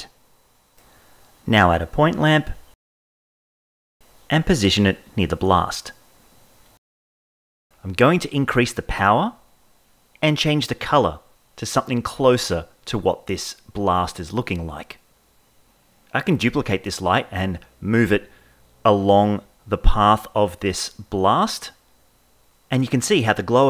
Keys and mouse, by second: 0.0 KP_7, 1.8 shift+a, 3.3 g, 3.8 Left, 4.1 Left, 4.2 Left, 5.1 KP_1, 5.1 g, 5.1 KP_0, 6.4 g, 8.1-10.5 drag, 15.1 Right, 15.6 Right, 16.4 Right, 16.8 Right, 17.2 Right, 19.1 shift+d, 19.9 shift+middle drag, 20.7 g, 20.7 y, 20.8 z, 21.2 Right, 21.3 Right, 21.4 Right, 21.5 Right, 21.8-23.6 typing, 22.9 shift+middle click.